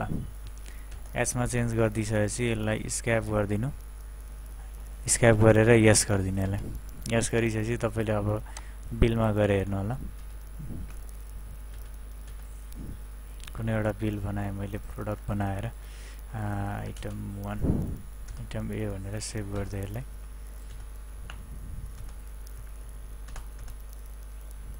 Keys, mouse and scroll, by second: 0.9 Return, 5.1 Right, 6.4 Return, 8.7 click, 9.4 Return, 10.2 Return, 13.7 F2, 16.2-17.5 typing, 18.3 Return, 19.0 ctrl+w, 19.6 Return.